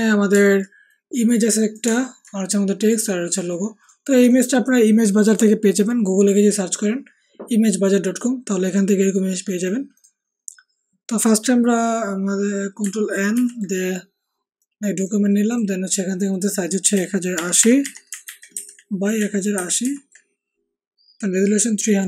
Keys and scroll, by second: 13.3 ctrl+n, 17.3 1, 17.3 0, 17.6 8, 17.8 0, 18.2 ctrl+a, 18.5 ctrl+c, 19.5 ctrl+a, 19.8 ctrl+v.